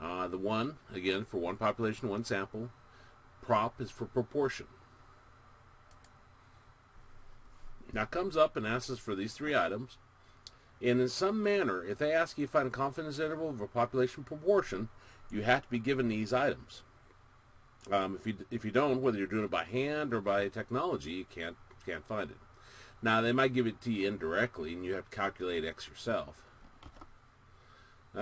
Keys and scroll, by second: 6.3 Return.